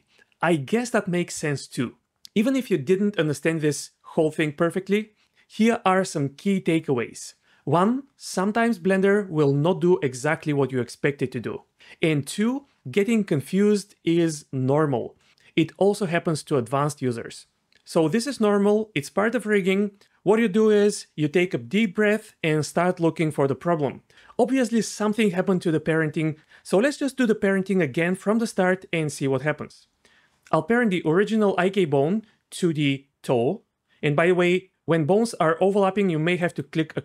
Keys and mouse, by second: 30.2 ctrl+z, 36.3 click.